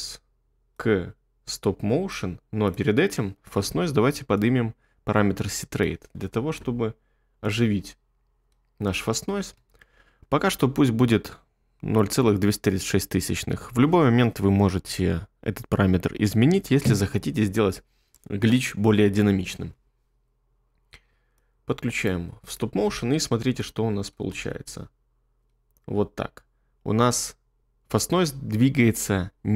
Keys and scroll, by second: 9.5 space, 23.5 1, 24.3 space.